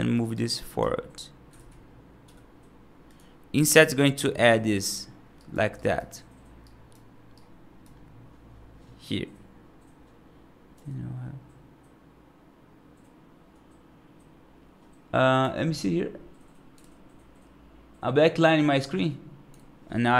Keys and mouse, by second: 0.2 right click, 1.4 ctrl+z, 2.1 |, 3.5 middle click, 4.1 right click, 5.2 right click, 5.6 right click, 6.5 right click, 7.2 right click, 10.6 g.